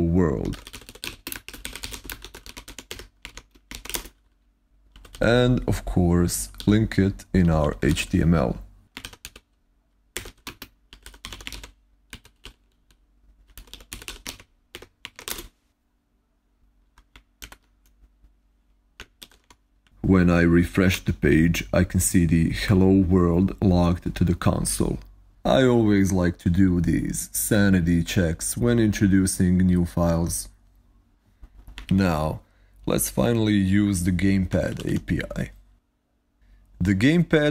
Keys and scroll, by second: 0.0-9.0 typing, 9.0 ctrl+y, 10.0 Escape, 10.1-15.6 typing, 17.8 ctrl+Left, 19.1 alt+super+i, 20.8 super+r, 32.3 ctrl+Right, 34.2-35.2 typing.